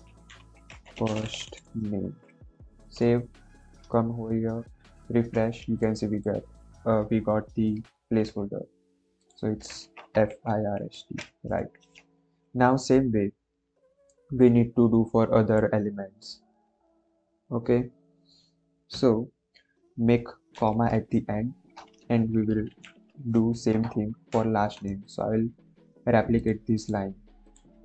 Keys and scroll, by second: 0.0-1.6 typing, 1.9 ctrl+s, 9.9 BackSpace, 10.2 i, 10.8 ctrl+s, 11.7 End, 20.5 ,, 21.5 Return, 22.6 shift+', 23.6 BackSpace, 24.1 Right.